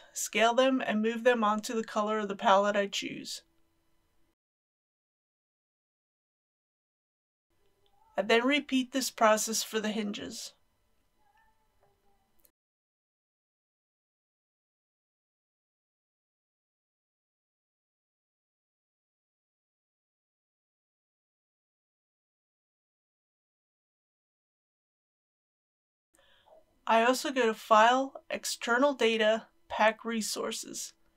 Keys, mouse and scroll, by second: 0.5 s, 3.7 click, 4.3 g, 5.5 click, 6.1 Tab, 6.8 middle click, 8.9-12.5 drag, 12.6 KP_1, 12.8 Tab, 12.9 a, 13.2 u, 13.3 click, 14.1 g, 15.0 shift+click, 15.4 g, 16.3 click, 17.4 Tab, 17.6 click, 18.6 Tab, 18.8 a, 19.1 u, 19.3 click, 19.9 g, 20.0 x, 20.8 shift+click, 21.2 g, 21.9 click, 22.2 s, 22.6 click, 22.9 Tab, 23.0 click, 23.7 Tab, 24.2 click, 24.7 middle click, 27.3 click.